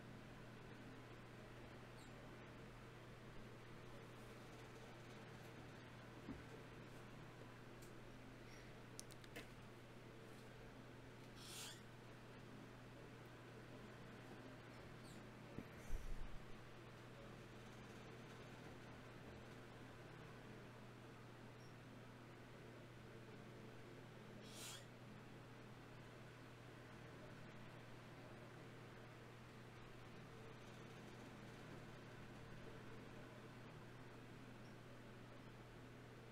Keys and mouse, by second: 1.3 middle click, 1.5-4.5 drag, 3.3 s, 5.1 g, 6.9 click, 7.5 s, 8.3 g, 9.5 r, 10.1 g, 10.5-12.5 drag, 10.7 s, 11.7 g, 13.9 e, 15.1 s, 16.3 g, 22.8-24.4 drag, 27.2 ctrl+r, 30.4-31.6 drag, 31.6 ctrl+Tab, 32.4-34.2 drag, 33.4 ctrl+b, 35.0 ctrl+z.